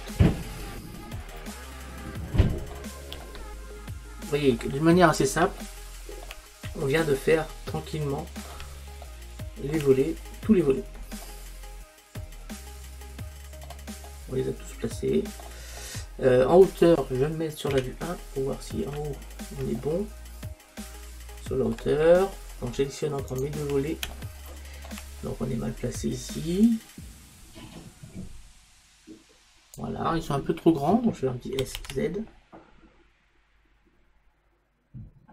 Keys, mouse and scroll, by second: 0.0-1.7 drag, 1.7-3.2 middle drag, 8.8 middle click, 15.9-17.7 middle drag, 17.8 KP_1, 23.4-28.6 drag, 31.6 s.